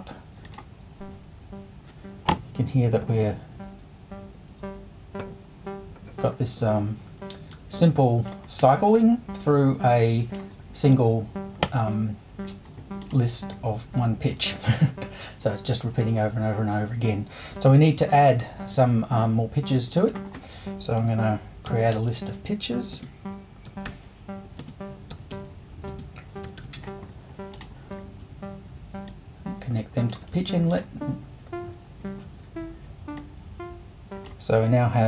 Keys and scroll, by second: 18.1 super+2, 21.0 5, 22.9-27.1 typing.